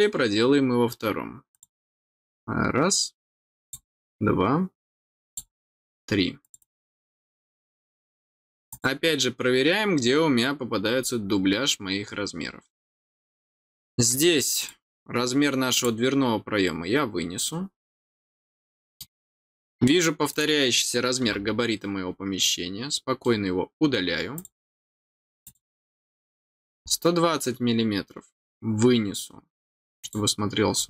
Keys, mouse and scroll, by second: 1.5 click, 3.6 click, 5.2 click, 6.4 click, 6.6 click, 8.7 click, 11.2 middle click, 11.2 scroll down 1, 12.0 scroll up 1, 14.5 click, 15.7 click, 17.9 click, 18.5 middle click, 20.3 click, 22.4 middle click, 24.3 click, 25.4 click, 26.7 scroll down 1, 30.0 click, 30.7 scroll down 1.